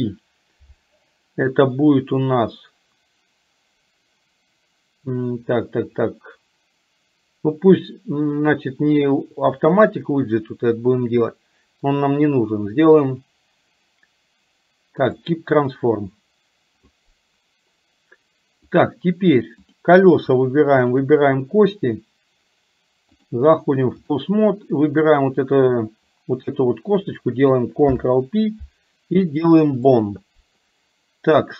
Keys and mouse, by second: 18.7 click, 19.7 click, 21.0 shift+click, 23.2-24.2 drag, 25.2 click, 26.6 shift+middle click, 27.9 ctrl+p.